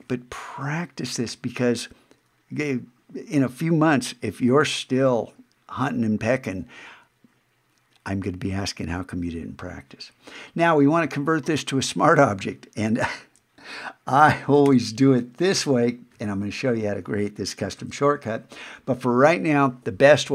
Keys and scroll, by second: 14.7 alt+shift+super+o, 17.8 super+z.